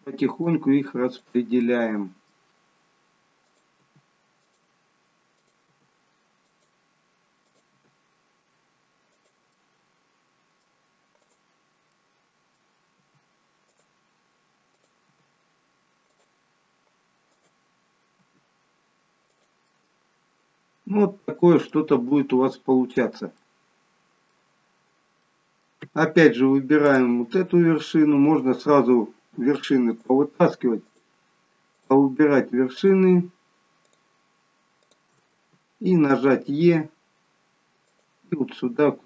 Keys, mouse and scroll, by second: 0.3 click, 0.5 g, 1.6 middle click, 3.3 click, 3.8 g, 5.3 click, 5.6 g, 7.4 click, 7.7 g, 9.6 middle click, 11.1 click, 11.9 middle click, 12.9 g, 14.6 click, 15.0 g, 17.3 click, 18.1 g, 19.6 middle click, 21.9-22.6 scroll down 2, 23.3 middle click, 25.2 middle click, 26.7 click, 29.8 shift+click, 36.5 e, 38.1 middle click.